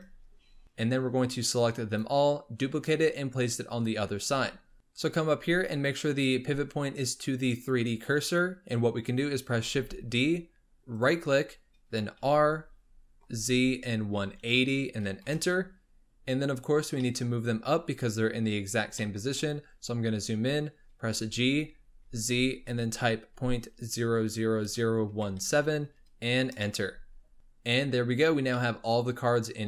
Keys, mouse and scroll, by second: 0.2-0.6 scroll down 8, 1.1 click, 4.2 scroll up 3, 4.7-5.7 shift+middle drag, 5.7-8.7 drag, 9.6 shift+d, 12.1 r, 16.6 scroll up 2, 17.0-18.3 shift+middle drag, 18.3-18.8 scroll up 5, 19.0-19.3 shift+middle drag, 19.3-21.1 scroll up 7, 21.1 g, 26.9 scroll down 4, 28.1-28.5 scroll up 3, 28.5-29.6 middle drag.